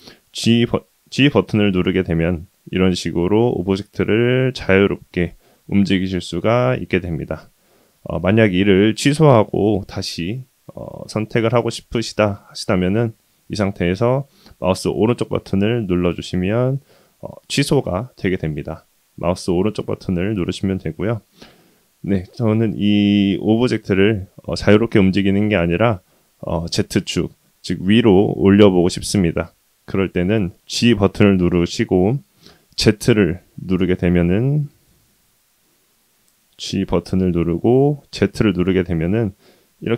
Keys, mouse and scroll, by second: 16.2-18.1 middle drag, 18.9-19.5 right drag, 19.5 click, 21.8 click, 35.4 z, 36.4 click, 37.0 g.